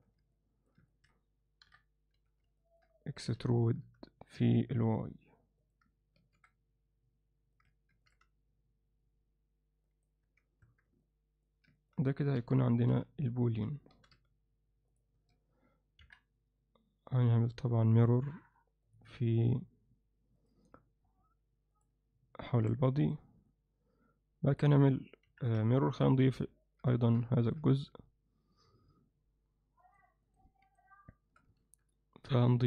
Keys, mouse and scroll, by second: 0.4 alt+middle click, 0.9 ctrl+middle click, 1.7 KP_7, 2.2 z, 2.6 ctrl+alt+middle click, 3.4 e, 6.2 ctrl+r, 10.3 z, 10.7 Tab, 11.0-11.5 middle drag, 11.8 ctrl+alt+middle click, 12.4 KP_3, 12.9 z, 14.0 g, 15.2 z, 16.0 KP_1, 18.2-19.0 drag, 22.6 alt+a, 23.5-24.6 alt+middle drag, 25.3 KP_1, 26.1 z, 26.7 ctrl+alt+middle click, 27.0 alt+shift+middle click, 27.4 ctrl+alt+middle click, 31.6 shift+a.